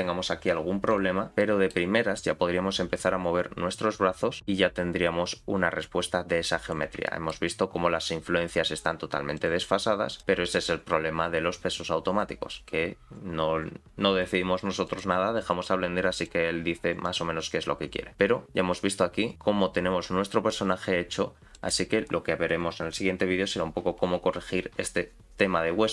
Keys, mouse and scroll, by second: 0.9 click, 1.3 scroll up 6, 1.4 shift+middle click, 2.2-2.8 scroll down 1, 2.8-4.4 scroll down 2, 2.8 r, 4.4 click, 4.7 r, 7.1 shift+middle click, 7.4-8.2 scroll down 1, 8.2-9.8 scroll down 1, 8.2 r, 10.1 click, 10.4 r, 17.0 click, 17.7 r.